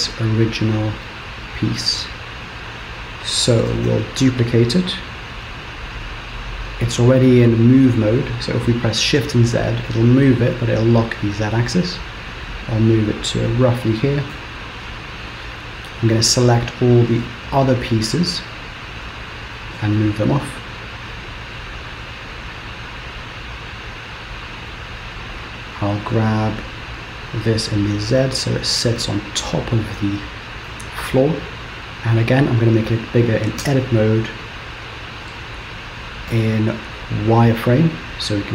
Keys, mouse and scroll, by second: 0.1 click, 1.1 middle click, 3.8 shift+d, 14.4 KP_3, 15.0-16.0 scroll up 2, 16.0 click, 17.7 shift+click, 18.2 click, 18.7 click, 19.6 g, 25.3 click, 26.7-27.3 scroll up 1, 27.3 g, 30.8 middle click, 32.0 scroll down 2, 32.3-33.7 scroll up 3, 35.4 Tab, 36.3 z.